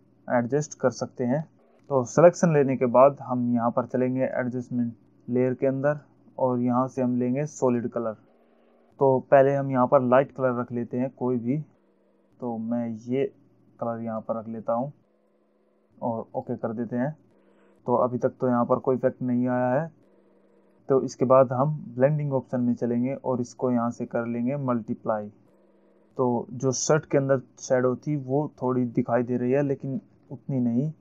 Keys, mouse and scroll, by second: 0.4 alt+scroll up 1, 0.9 alt+scroll down 1, 1.6 scroll down 1, 6.3 click, 8.1 click, 11.4 click, 13.6 click, 16.8 click, 23.0 click, 25.7 click.